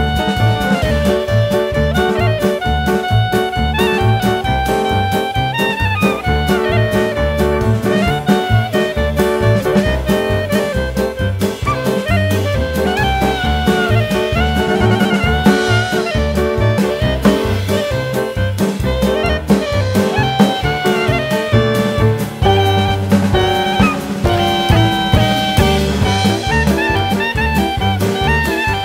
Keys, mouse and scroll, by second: 0.5-1.2 scroll up 2, 1.2 click, 5.7 click, 7.1 middle click, 7.5-8.0 scroll down 4, 8.0 Tab, 8.2 click, 8.6 middle click, 10.4 click, 10.8 shift+middle click, 11.2 scroll up 1, 11.5 Tab, 11.8 click, 13.6 alt+z, 14.9 Tab, 15.3 click, 15.9 click, 16.6 click, 18.4-18.7 scroll up 1, 18.7 s, 20.3-20.7 scroll up 1, 20.7 middle click, 21.8 click, 23.1 middle click, 24.5 click, 25.0 shift+middle click, 25.3-26.0 scroll up 2, 26.0 Tab, 26.3 middle click, 26.8-27.1 scroll down 2, 26.9 middle click, 27.5 Tab, 27.7 middle click, 28.5 Tab.